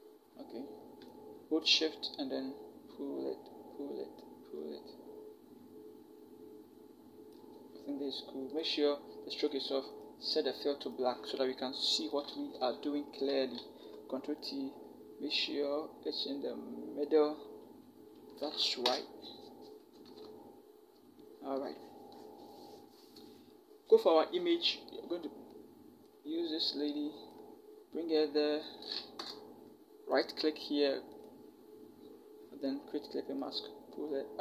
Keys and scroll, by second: 12.4 v, 13.1 ctrl+v, 13.4 ctrl+t, 18.7 Return, 19.9 Down, 20.0 Down, 29.0 Return.